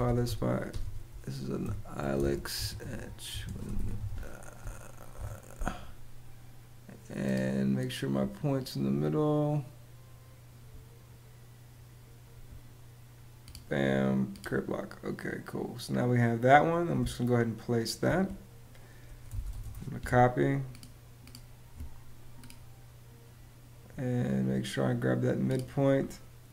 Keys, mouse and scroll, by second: 0.0-4.9 typing, 16.7 space, 18.8-19.6 typing.